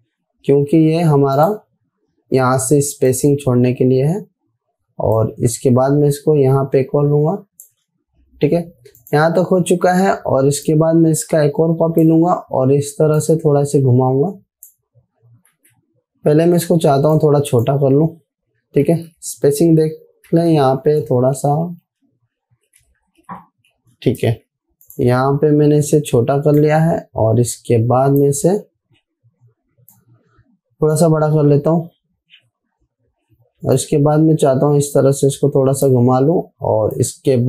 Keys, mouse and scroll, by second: 0.3 alt+scroll down 1, 1.8-8.4 drag, 8.7 alt+scroll down 1, 9.4-12.7 drag, 16.0 ctrl+z, 17.2 a, 17.6-18.2 drag, 19.3 ctrl+k, 20.7 m, 20.9 m, 21.8 shift+Down, 23.9 shift+Down, 24.9 v, 25.3-29.0 drag, 29.0 alt+scroll up 1, 30.4-31.6 drag, 34.3-36.4 drag.